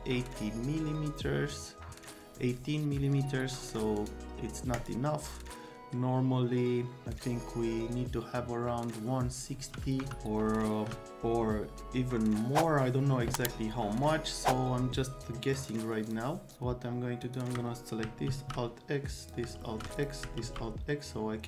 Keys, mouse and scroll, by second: 3.9 right click, 4.0 scroll down 2, 4.7 click, 9.5 c, 10.0 F3, 15.5 right click, 16.1 click, 16.5 click, 17.2 click, 18.3 alt+x, 19.2 click, 19.6 alt+z, 19.9 click, 20.4 alt+z, 21.4 click.